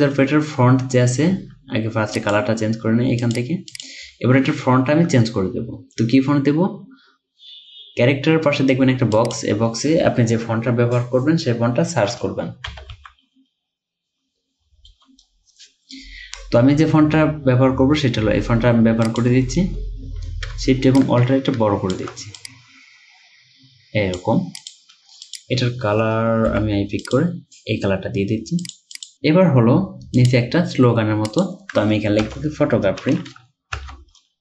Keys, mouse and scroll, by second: 12.7 typing, 14.7-15.4 typing, 21.0 alt+shift+click, 26.5 typing, 29.0 double click, 29.5 scroll down 1, 32.3 BackSpace, 33.8 Caps_Lock.